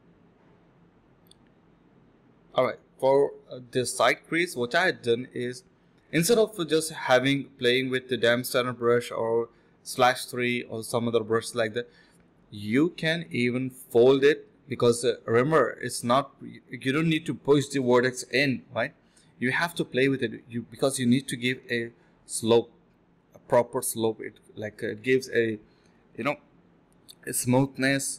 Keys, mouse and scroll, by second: 1.1 alt+click, 2.8 d, 4.0 alt+click, 4.2 alt+click, 4.5 alt+double click, 4.6 alt+click, 5.0 ctrl+b, 5.4 double click, 5.7 typing, 6.7 alt+click, 6.9 alt+click, 7.7 double click, 8.8 shift+click, 10.3 alt+click, 10.4 alt+click, 10.7 ctrl+b, 11.0 double click, 11.7 typing, 12.1 double click, 12.7 shift+click, 13.1 shift+click, 13.4 alt+click, 15.4 double click, 16.5 shift+click, 17.7 alt+click, 18.0 alt+click, 18.7 alt+click, 19.6-20.4 typing, 20.4 alt+click, 20.7 alt+click, 20.9 alt+click, 21.4 typing, 23.2 alt+click, 23.4 alt+click, 23.6-24.0 typing, 26.6 typing.